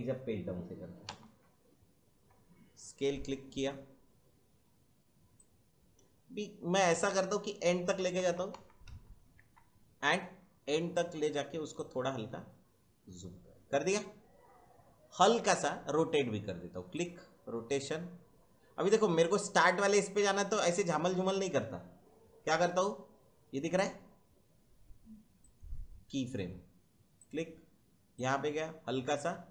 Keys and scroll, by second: 1.0 Right, 8.0 Right, 9.3 Left.